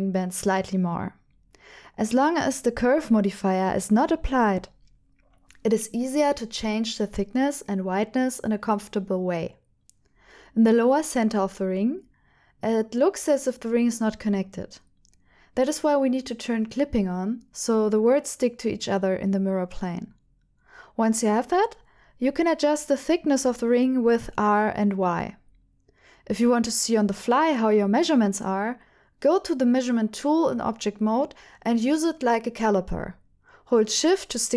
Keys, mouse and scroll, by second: 0.4 alt+a, 1.2 c, 3.1 right click, 3.4 shift+middle click, 4.2 middle click, 5.3 KP_1, 6.9 shift+middle click, 8.6 r, 8.9 z, 10.7 right click, 11.4 r, 11.6 y, 18.6 right click, 19.2 g, 19.4 z, 20.3 right click, 20.3 r, 20.3 y, 21.9 click, 23.0 click, 24.3 r, 24.6 y, 30.1 click, 30.1 g, 30.1 z, 31.5 Tab, 32.3 click, 34.0-34.5 drag.